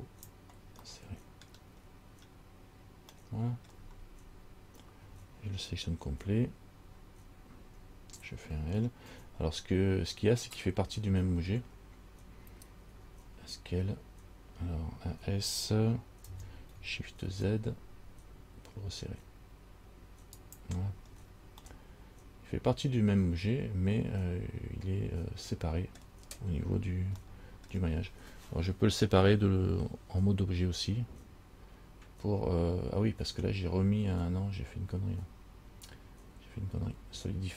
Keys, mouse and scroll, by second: 1.1 middle click, 2.0-3.3 scroll up 2, 3.4 middle click, 6.3 a, 7.1 a, 7.8 a, 9.4 l, 13.1 s, 21.3-21.8 scroll down 3, 21.9 middle click, 26.2-27.4 scroll down 1, 27.5 shift+middle click.